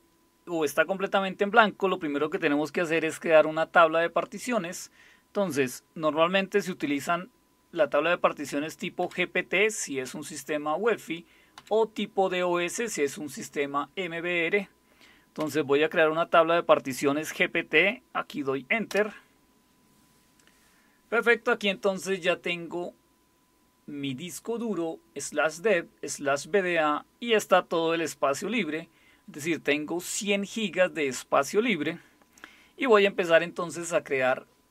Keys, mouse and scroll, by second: 8.5 End, 9.0 Up, 11.6 Down, 15.4 Up, 18.9 Return.